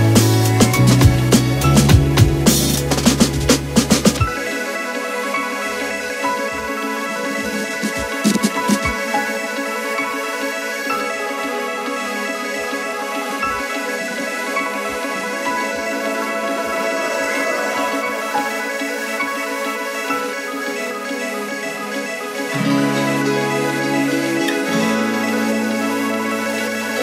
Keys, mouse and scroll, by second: 0.6 click, 3.8 click, 10.7 click, 14.5 click, 16.6 click, 22.6 click, 23.4 Down, 24.2 Up, 26.9 t.